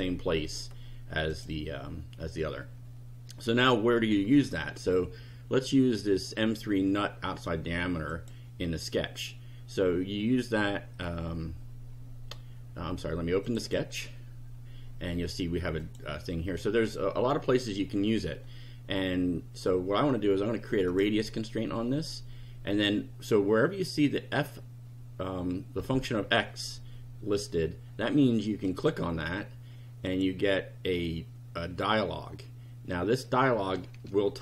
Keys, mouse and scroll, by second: 1.3 click, 8.1 click, 13.4 click, 15.8 click, 20.9 click, 28.6 click, 30.1 click.